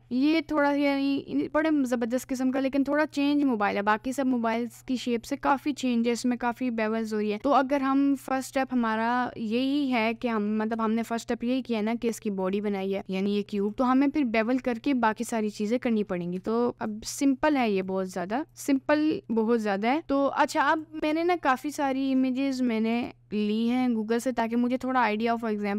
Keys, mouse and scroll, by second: 9.6 middle click, 10.8 Tab, 13.6 click, 16.4 Tab, 16.7 click, 18.0 click, 19.1 middle click, 19.2 click.